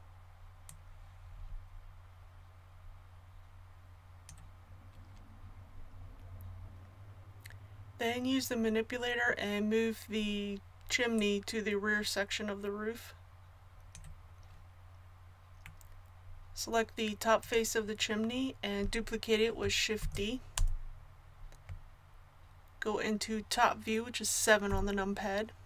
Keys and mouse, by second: 0.7-20.0 drag, 20.0 shift+d, 24.7 KP_7.